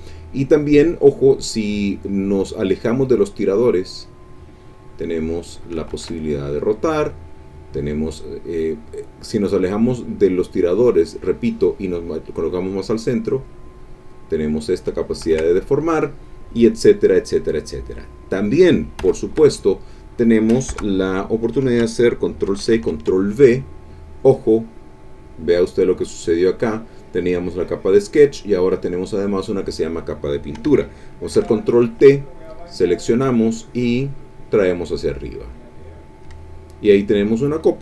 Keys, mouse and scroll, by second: 3.8-5.8 drag, 5.9 ctrl+z, 12.8-14.3 drag, 15.2 ctrl+z, 19.0 Escape, 20.7 Return, 22.4 ctrl+c, 22.7 ctrl+v, 25.7-26.7 drag, 31.3 ctrl+t, 32.3 click, 33.3-34.7 drag, 34.8 middle click, 35.7 click, 36.8 click.